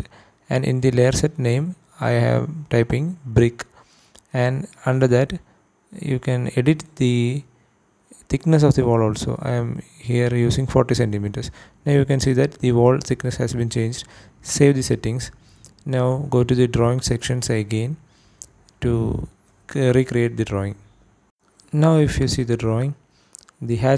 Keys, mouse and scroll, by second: 4.7 click, 5.8-8.5 drag, 9.9 click, 12.9 click, 20.6 click, 22.3 click, 23.9 click.